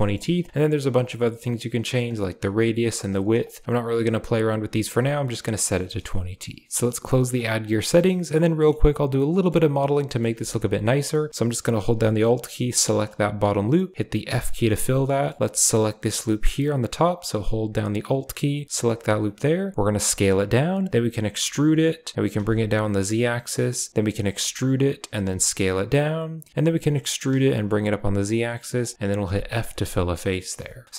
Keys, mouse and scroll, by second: 1.0-2.0 shift+drag, 2.5 shift+click, 3.4 click, 7.3 click, 7.7 shift+middle click, 8.0-8.6 middle drag, 9.1-9.4 middle drag, 9.6 middle click, 10.3 Tab, 12.9 alt+click, 13.7 click, 14.2 f, 14.6-15.2 middle drag, 18.7 alt+drag, 19.7 s, 21.3 e, 24.2 e, 26.5 e, 29.2 f, 29.6 click, 30.5 Tab, 30.8 click.